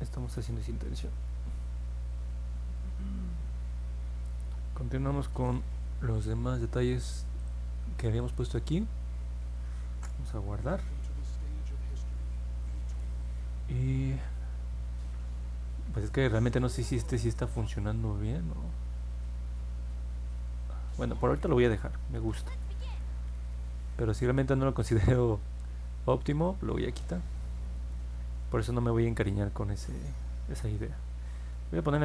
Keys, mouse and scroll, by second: 1.5 middle click, 1.8 middle click, 3.6 middle click, 4.3 middle click, 4.7 middle click, 7.3 click, 7.6 middle click, 8.1 click, 21.6 middle click, 22.2 middle click.